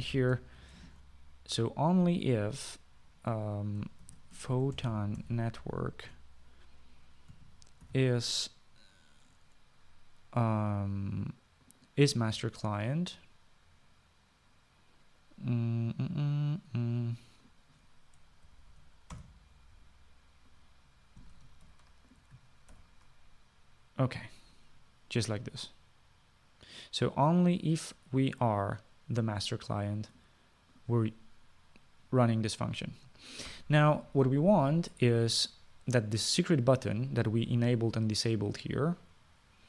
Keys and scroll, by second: 0.3 Return, 1.0-2.4 typing, 5.1-7.1 typing, 7.3 Return, 8.4-9.7 typing, 19.9 {, 20.4 Return, 22.9 ctrl+x, 24.0 ctrl+v.